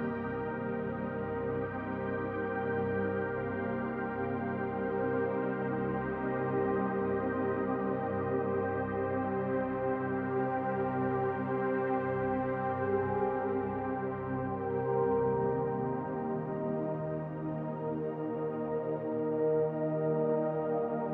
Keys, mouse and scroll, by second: 3.5 middle click, 8.8 middle click, 12.3 click, 20.8 click.